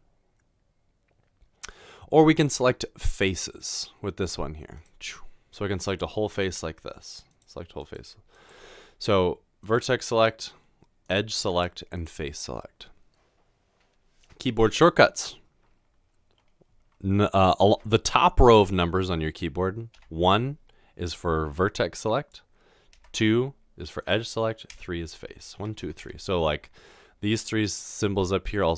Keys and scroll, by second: 22.9 typing, 24.7 typing, 25.8 typing.